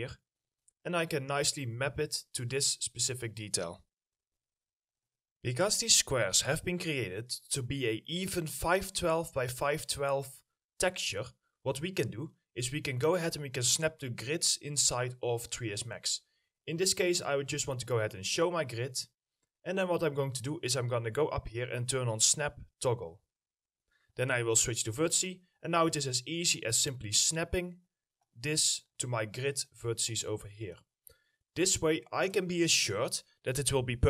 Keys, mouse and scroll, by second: 0.2 scroll down 1, 0.5 middle click, 1.4-2.1 scroll down 1, 2.1 middle click, 6.6-7.0 scroll down 1, 7.0 middle click, 9.8 middle click, 10.6-11.0 scroll up 1, 11.6 middle click, 14.1 scroll down 1, 14.3 middle click, 17.9 middle click, 30.4 middle click.